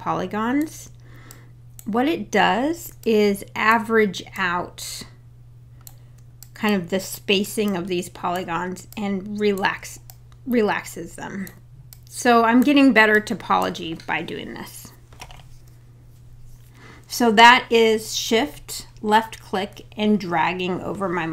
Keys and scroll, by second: 16.3 `.